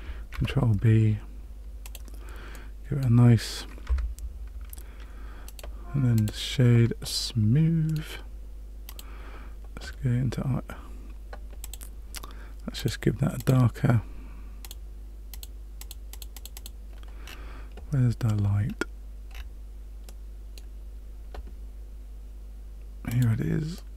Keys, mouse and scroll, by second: 0.3 ctrl+b, 2.5 middle click, 3.8 Tab, 5.4 right click, 7.8 middle click, 8.9 click, 11.6 click, 12.7 click, 13.3 click, 14.6 click, 16.5 click, 17.3 scroll down 2, 18.7-19.3 scroll down 1, 19.3-20.0 scroll down 3, 20.0 middle click, 23.1 click, 23.7 middle click.